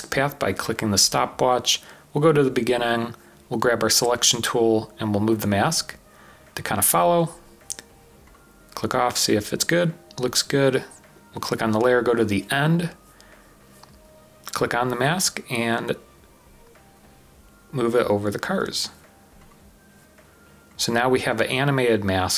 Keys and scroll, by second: 5.3-6.1 typing, 8.1-8.9 typing.